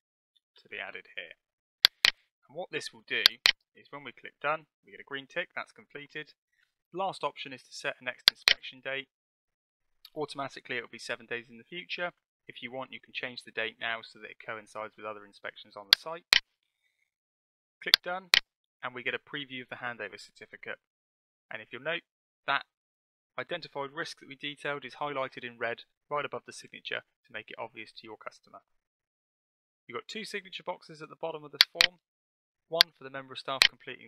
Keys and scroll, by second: 0.0-1.3 typing.